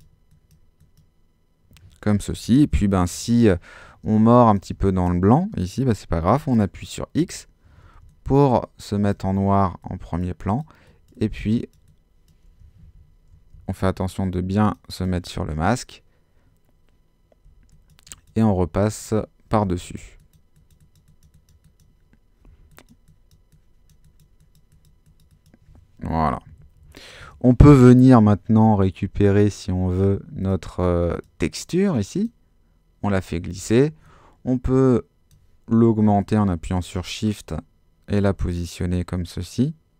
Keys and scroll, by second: 4.0 super+space, 7.2 x, 7.9 ctrl+x, 12.8 super+z, 13.3 alt+super+z, 17.4 x, 19.6 x, 22.5 x, 26.2 super+-, 27.1 super++.